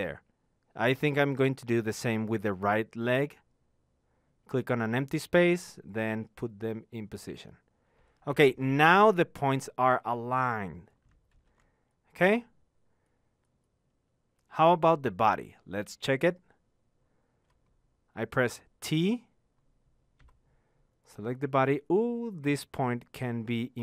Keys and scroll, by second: 0.3 t.